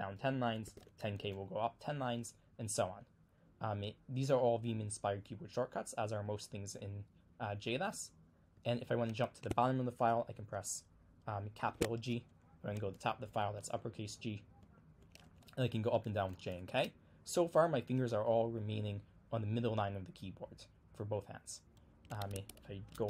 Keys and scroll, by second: 0.0-1.5 typing, 8.6 j, 10.2 j, 11.6 shift+g, 13.3 g, 14.6-16.7 typing, 22.4 super+Tab.